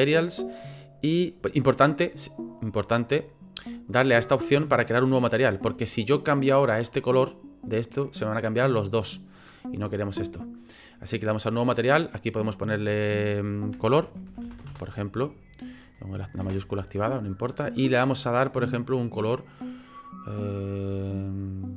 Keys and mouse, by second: 0.3 click, 12.1 middle click, 16.0-17.3 middle drag.